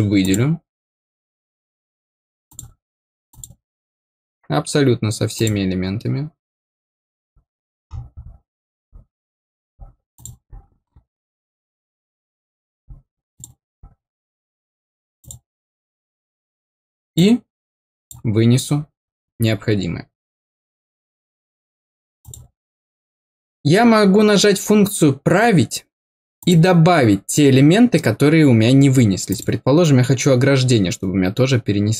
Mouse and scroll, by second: 0.1 click, 2.4 click, 3.2 click, 5.3 click, 7.8-8.2 scroll down 1, 10.1 click, 11.1 scroll down 1, 13.3 click, 15.1 click, 17.1 click, 22.1 click, 26.3 click, 29.2 click.